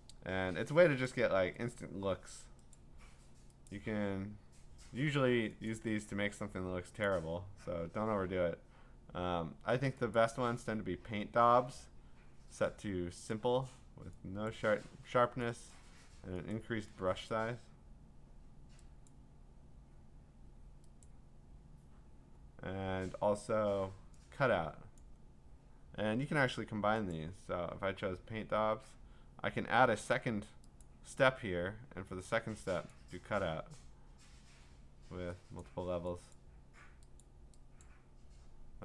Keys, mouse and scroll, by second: 1.1 click, 1.7 click, 2.8 click, 3.7 click, 5.7 click, 7.1 click, 10.2 click, 14.5 click, 15.7 click, 16.5 click, 17.3 click, 19.1 click, 21.1 click, 25.0 click, 27.1 click, 31.0 click, 32.9 click, 35.6 click, 36.3 click, 37.2 click, 37.8 click.